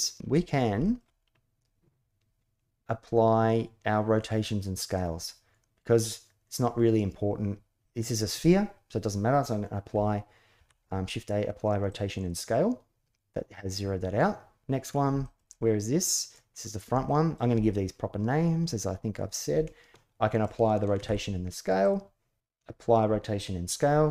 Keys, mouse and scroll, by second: 0.6 shift+click, 10.3 ctrl+a, 14.3 ctrl+a, 15.0 shift+middle drag, 15.2-16.1 middle drag, 16.8-17.2 shift+middle drag, 20.7 ctrl+a.